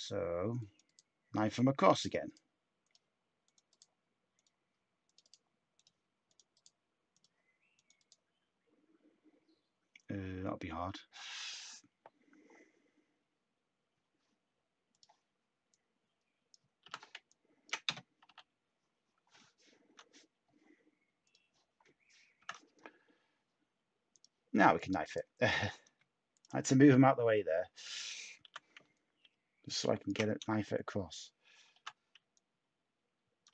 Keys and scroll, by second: 16.8 t, 18.2 /, 22.3 ctrl+k, 25.8 space, 28.4 t, 30.4 space, 31.7 t.